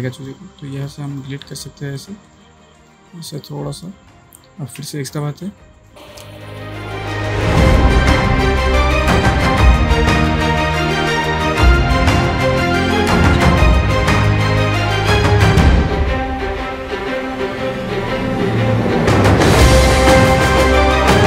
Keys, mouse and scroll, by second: 0.2 click, 4.8 x, 5.3 space, 5.5 click, 5.8 space, 6.1 ctrl+click, 6.2 space, 6.6 click, 6.8 ctrl+space, 6.9 ctrl+click, 7.0 ctrl+space, 7.3-8.2 drag, 8.9 x, 9.3 click, 10.4 space, 10.7 ctrl+click, 11.1 ctrl+click, 12.1 x, 12.2-13.2 click, 13.1-17.3 typing, 13.3 click, 13.4 click, 14.5 click, 15.4 click, 16.0 click, 16.4 click, 17.8 click, 18.6 space, 18.6 click, 18.7 space, 19.3 click, 20.7 space, 20.7 click, 20.8 space.